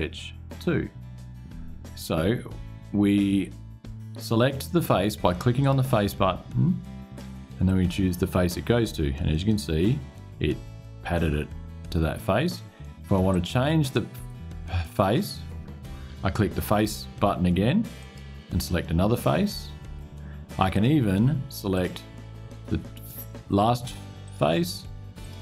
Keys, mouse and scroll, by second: 5.3 click, 7.4 click, 13.0 click, 17.7 click, 20.4 click, 21.4 click, 24.0 click, 24.9 click.